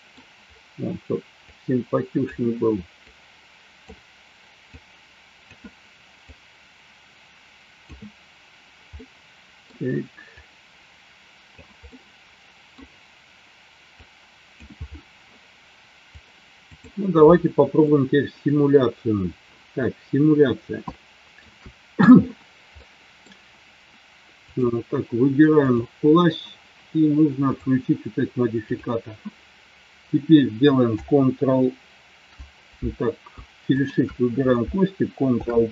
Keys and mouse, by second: 1.5 click, 3.1 click, 4.7 click, 6.2-7.9 drag, 9.0 middle click, 10.4-11.6 drag, 12.2 middle click, 14.0 click, 16.2 click, 17.9-20.0 middle drag, 20.8-21.4 shift+middle drag, 22.7 middle click, 24.5 click, 25.6 click, 28.7 click, 33.7 shift+click, 35.2 ctrl+p.